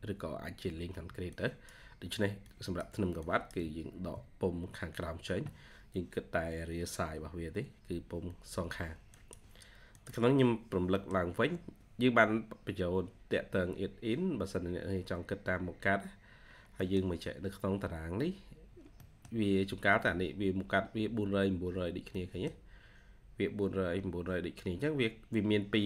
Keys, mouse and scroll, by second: 0.8 Escape, 3.8 ctrl+scroll down 1, 10.8 middle click, 12.6 scroll up 1, 14.4-15.5 scroll down 1, 15.5-16.3 scroll up 1, 16.3-16.7 scroll down 1, 16.7 middle click, 17.3-17.7 scroll up 1, 17.7 scroll down 1, 17.9 scroll up 1, 18.9 middle click, 22.0 middle click, 23.9-24.5 scroll down 1, 24.7 scroll up 1.